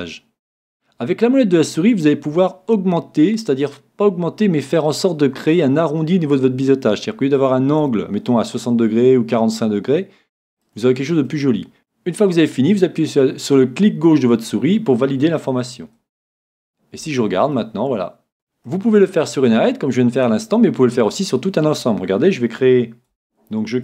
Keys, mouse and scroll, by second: 10.6-11.8 drag, 11.3 middle click, 17.0 a, 17.5 middle click, 21.8-23.8 middle drag, 23.1 Tab.